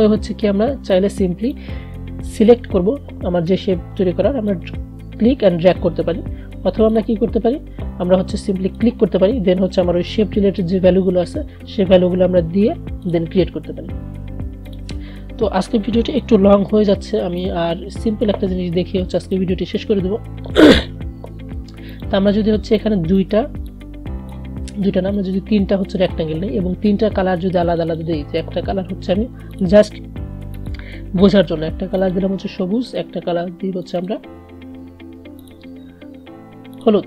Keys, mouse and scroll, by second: 1.3-7.0 drag, 13.2 click, 17.5-19.8 drag, 19.8 Delete, 22.0-27.8 drag.